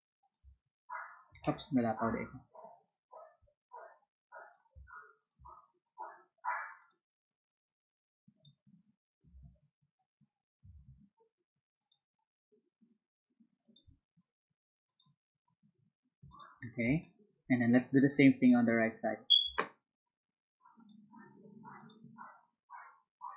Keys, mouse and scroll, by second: 0.2 alt+click, 1.4 ctrl+z, 2.8-4.5 drag, 5.8 alt+click, 6.7 alt+click, 8.3 alt+click, 9.3 ctrl+z, 10.7 ctrl+z, 11.7 click, 13.6 click, 16.2 ctrl+click, 16.8 space, 16.9-18.4 drag, 20.7 click, 21.7 click.